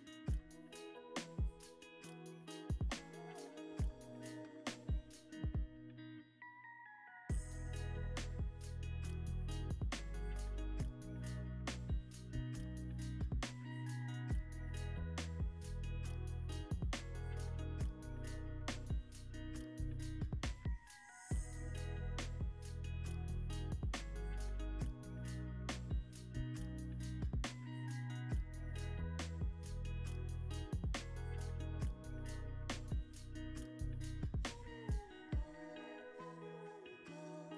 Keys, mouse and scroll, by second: 10.1 shift+click, 12.3 scroll, 12.3 scroll down 1, 12.4 scroll up 1, 13.0 middle click, 13.5 shift+click, 14.2 middle click, 14.6-15.0 scroll up 1, 15.2 shift+click, 17.0 scroll up 1, 17.5 shift+click, 18.0 shift+middle click, 18.1 scroll up 1, 18.4 shift+click, 19.9 scroll up 1, 20.2 shift+click, 20.8 scroll up 1, 20.8 middle click, 21.1 scroll down 1, 21.7 shift+click, 24.2 scroll up 1, 24.6 shift+click, 25.0 middle click, 25.4-25.7 scroll down 1, 25.7-26.8 scroll up 1, 26.8 middle click, 26.9-27.3 scroll up 1, 27.6 shift+click, 33.1 scroll up 1, 33.4 middle click, 35.3 scroll up 1, 35.9 shift+click.